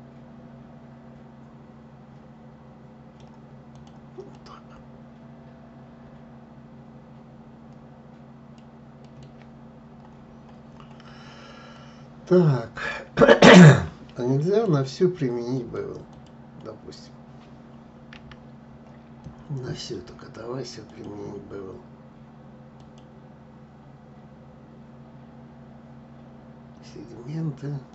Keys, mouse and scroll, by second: 3.4 click, 4.0-7.0 middle drag, 8.7-10.0 middle drag, 10.0-10.6 scroll up 3, 11.4-14.4 middle drag, 15.2 click, 15.8 click, 17.8 a, 20.5-23.5 drag, 27.6-27.9 drag.